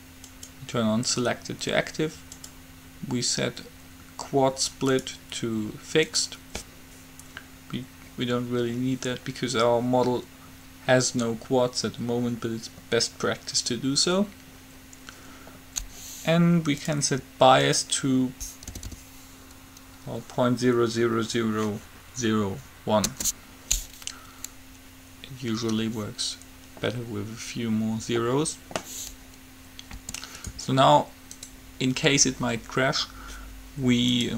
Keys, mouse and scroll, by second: 0.6-2.3 drag, 2.6-4.6 drag, 5.1-7.0 drag, 17.0-19.0 drag, 19.1 0, 30.0 g, 31.6-33.4 drag.